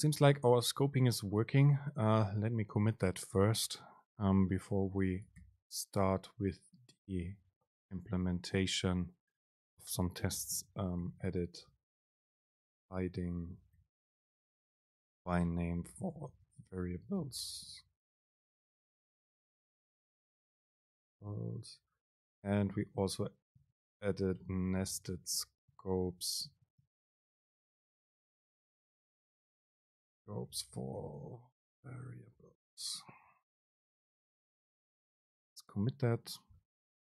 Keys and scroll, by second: 5.7 super+k.